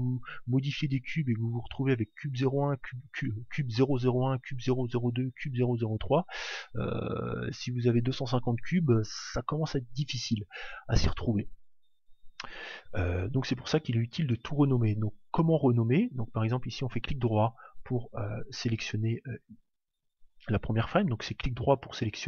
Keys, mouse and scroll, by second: 1.0 click, 15.9-20.2 right drag, 21.7-22.2 right drag.